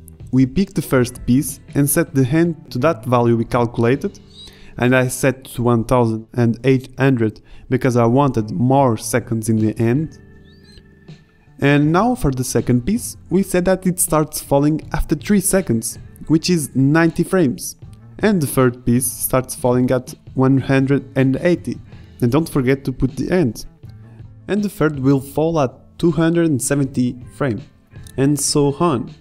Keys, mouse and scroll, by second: 8.4-9.2 right drag, 10.9 a, 14.7 right click, 17.3 KP_0, 24.7 KP_0, 28.2 KP_0, 28.9 KP_0.